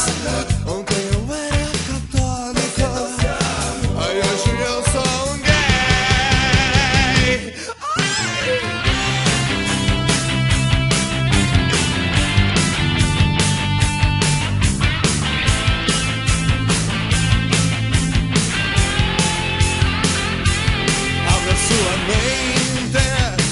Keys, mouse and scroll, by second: 1.1 click, 17.1 middle click, 19.6 KP_Decimal, 20.9 alt+a, 21.1 middle click, 22.6-23.1 scroll up 4.